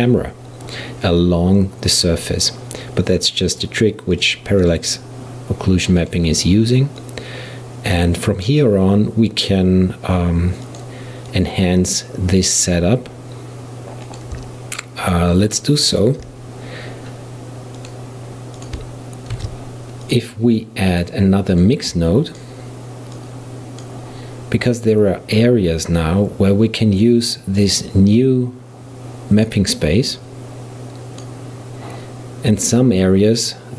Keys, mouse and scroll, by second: 4.2 click, 6.0 click, 7.0 click, 10.7 click, 11.3-14.2 drag, 15.1 shift+click, 15.5 shift+click, 16.0 shift+click, 17.8 click, 18.6-19.4 drag, 19.4 shift+d, 21.0 click, 21.6-26.2 drag, 27.6 click, 30.2-32.8 drag.